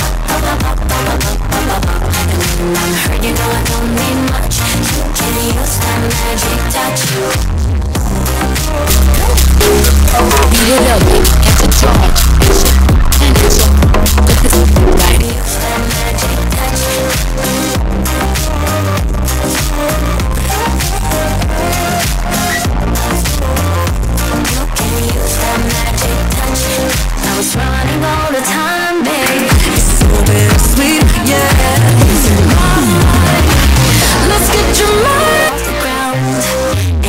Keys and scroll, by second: 15.5 Page_Down, 35.9 Page_Down.